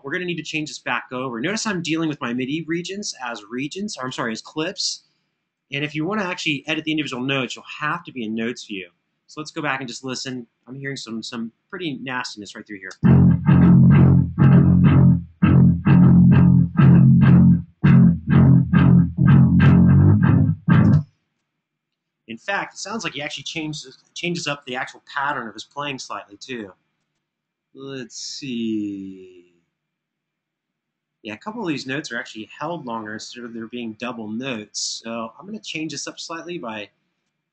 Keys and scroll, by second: 12.7 space, 20.6 space, 25.4 alt+f.